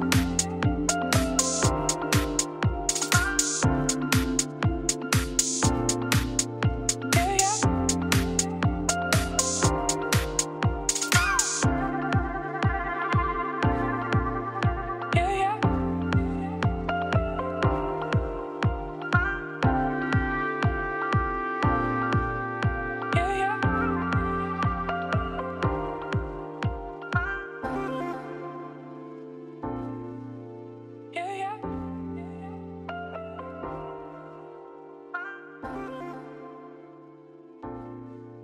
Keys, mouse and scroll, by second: 0.0 e, 2.9-3.3 scroll up 1, 3.3 2, 3.6 alt+shift+click, 4.0 ctrl+b, 8.1 middle click, 8.4 scroll down 2, 8.5 3, 8.8 z, 9.2 click, 9.4 shift+s, 9.5 Tab, 9.9 middle click, 10.3 Tab, 10.5 shift+a, 12.0 Tab, 12.2 Tab, 12.4 s, 13.6 KP_7, 14.1 middle click, 14.4 e, 15.1 KP_1, 15.4 g, 16.4 middle click, 16.7 a, 16.8 s, 17.4 click, 17.8 l, 18.1 s, 18.9 scroll down 1, 19.0 Tab, 19.4 Tab, 20.3 l, 20.4 l, 20.7 p, 21.3 p, 21.7 Tab, 22.2-23.6 drag, 23.7 click, 24.1-25.3 middle drag, 25.5 ctrl+z, 25.6 ctrl+z, 25.9-27.6 drag, 28.8 click, 29.4 middle click, 29.9 Tab, 30.1-32.5 typing, 30.2 click, 31.5 Tab, 31.7 click, 31.9 Tab, 34.0 x, 34.5 a, 34.6 e, 35.3 e, 36.0-37.1 middle drag, 37.8 e.